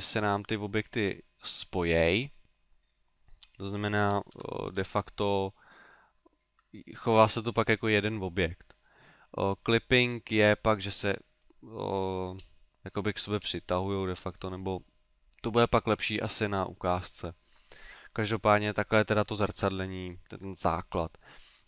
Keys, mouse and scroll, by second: 3.3 middle click, 4.3 Tab, 4.7-5.3 scroll up 5, 6.5 Tab, 7.4-8.1 scroll down 5, 9.6 click, 10.1 click, 20.3 Tab, 21.0 middle click.